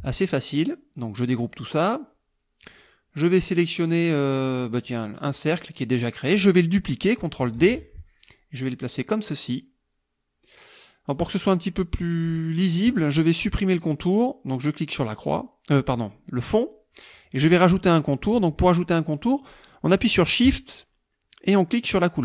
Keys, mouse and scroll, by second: 1.4 click, 2.6 click, 4.8 click, 7.6 ctrl+d, 8.0-11.3 ctrl+drag, 15.1 click.